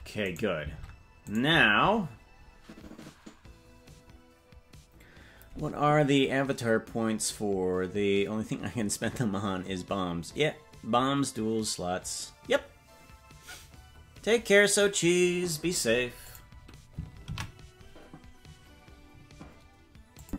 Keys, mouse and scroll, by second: 0.4 right click, 0.8 ctrl+Tab, 1.4 right click, 19.8 ctrl+s, 20.2 click.